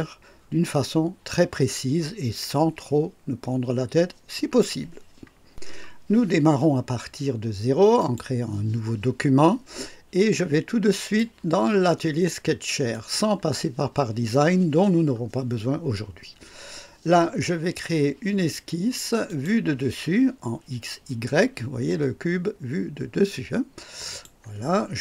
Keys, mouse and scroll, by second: 8.0 click, 10.9 click, 12.9 click, 19.2 click, 24.1 click.